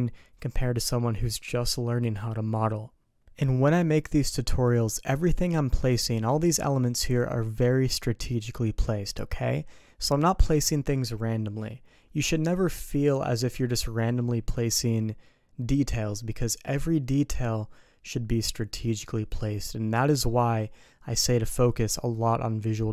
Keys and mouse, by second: 3.4 click, 3.6-4.6 middle drag, 6.2 middle click.